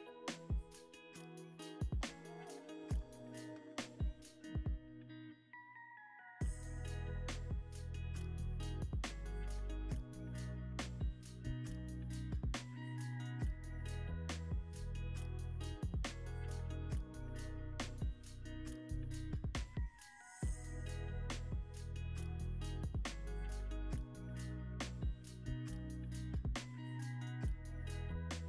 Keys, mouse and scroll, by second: 0.5 e, 0.7 z, 2.0 Tab, 2.6 Tab, 3.3 s, 4.7 y, 6.2 g, 6.5 x, 8.3 middle click, 9.4 scroll up 1, 9.7 middle click, 10.2 scroll up 1, 10.6 middle click, 11.9-12.4 scroll up 1, 12.4 middle click, 15.6 z, 23.2 2, 23.4 5, 23.6 Return, 24.8 double click, 26.0 5, 26.1 0, 26.2 Return, 26.3 0, 27.4 middle click, 28.1-28.4 scroll down 1.